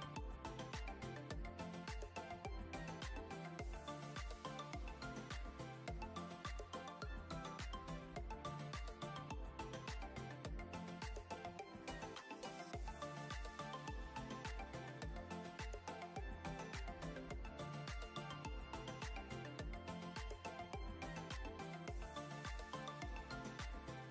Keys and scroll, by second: 12.8 ctrl+=, 15.7 ctrl+-, 16.4 ctrl+=, 17.0 ctrl+c, 17.3 ctrl+v, 17.9 ctrl+=, 19.2 ctrl+c, 19.5 ctrl+v, 21.2 ctrl+c, 23.0 ctrl+c.